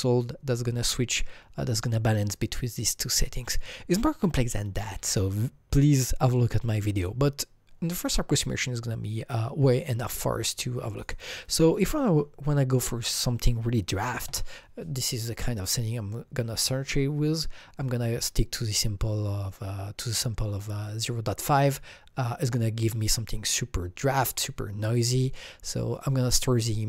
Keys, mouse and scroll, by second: 10.9 alt+Tab, 10.9 Right, 11.0 click, 11.1 double click, 12.1 KP_0, 14.0 KP_5, 14.3 KP_Enter, 15.7 click, 15.8 KP_Enter.